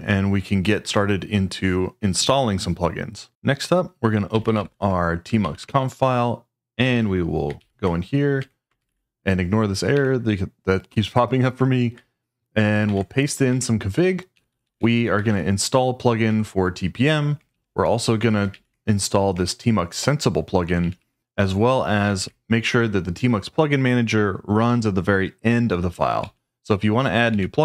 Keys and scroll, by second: 4.1-5.1 typing, 5.4 Tab, 5.6 Return, 7.5-9.9 typing, 8.4 Escape, 12.8 super+v, 13.5 Escape, 14.1-15.7 typing, 16.2 Escape, 17.4 Escape, 18.5 shift+v, 19.3 Escape, 20.6-22.1 typing, 25.8 Escape, 26.2 k, 26.7 k, 27.3 shift+o.